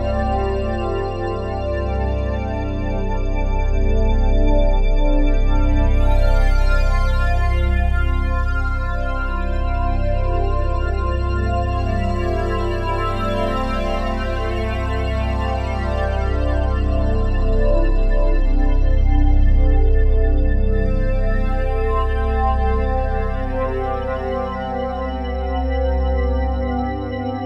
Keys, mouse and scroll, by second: 2.3-4.0 typing, 6.1-12.7 drag, 6.1 typing, 13.4-15.5 drag, 14.7-15.8 typing, 16.9-18.6 drag, 16.9 typing, 18.7 space, 19.9 space, 20.7 g, 21.7 click, 21.9-22.7 typing, 22.2-24.0 drag, 24.0 typing, 24.7-27.4 ctrl+alt+drag.